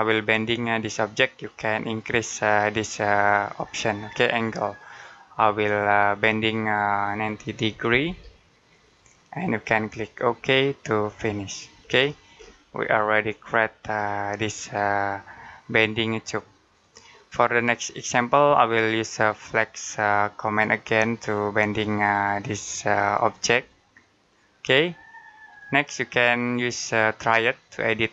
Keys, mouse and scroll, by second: 0.3 middle click, 3.4 click, 7.7-8.4 typing, 8.6 click, 11.6 scroll down 1, 11.8-12.2 scroll up 1, 12.8 middle click, 16.8-17.5 scroll down 1, 22.9 click.